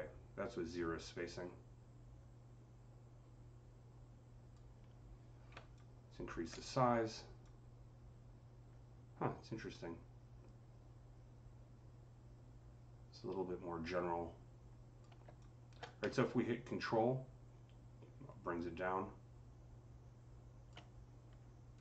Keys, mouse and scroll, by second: 5.4-6.4 typing, 16.1-21.8 ctrl+drag.